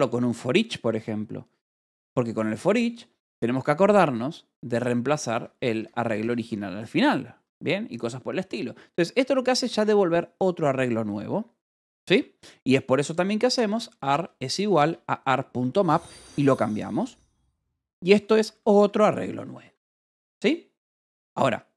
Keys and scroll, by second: 1.8 o, 3.1 Return, 5.2 Escape, 5.9 k, 6.4 Escape, 6.8 j, 8.8 k, 9.4 j, 10.2 shift+v, 11.9 Escape, 12.9-14.7 typing, 15.1 Escape, 17.1-19.4 typing, 19.5 Escape.